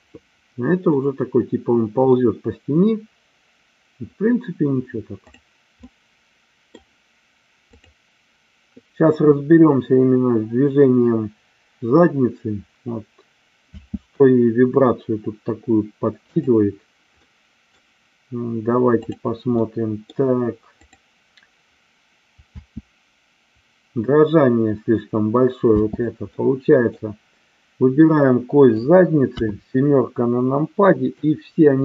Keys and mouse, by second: 1.1-2.2 middle drag, 5.8-6.8 middle drag, 8.9 click, 13.8 space, 16.3 click, 17.2 middle click, 18.9 click, 19.5 middle click, 20.8 click, 22.5 space, 25.8 space, 26.3 middle click, 29.3 KP_7, 31.2-31.8 drag.